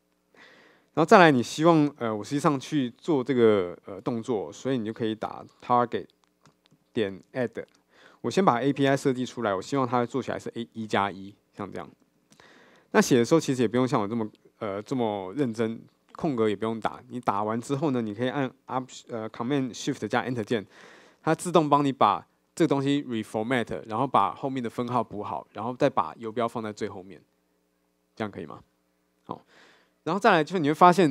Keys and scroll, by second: 6.5 Return, 20.6 ctrl+shift+super+Return.